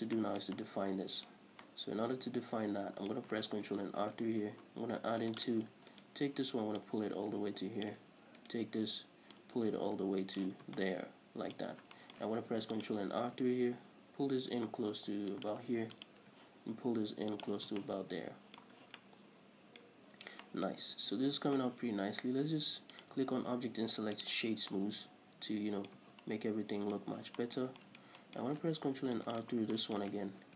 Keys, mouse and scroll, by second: 3.9 ctrl+r, 5.7 click, 6.2 alt+right click, 7.1-8.7 drag, 8.7 alt+right click, 9.6-11.1 drag, 10.9 scroll down 2, 11.0 Tab, 11.1-15.8 middle drag, 11.9 Tab, 12.0 scroll up 2, 12.8 ctrl+r, 15.8 shift+click, 16.1 ctrl+r, 17.8 shift+click, 17.9 scroll down 1, 18.0 Tab, 18.1-23.3 middle drag, 19.1 scroll down 1, 20.2 scroll up 1, 21.0 scroll up 1, 21.1 Tab, 23.3-25.0 drag, 24.8 scroll down 2, 25.0-29.7 middle drag, 26.2 scroll up 1, 26.3 Tab, 27.3-27.7 scroll up 1, 29.2 ctrl+r, 29.7 click, 29.8 scroll down 2, 30.1-30.5 shift+middle drag.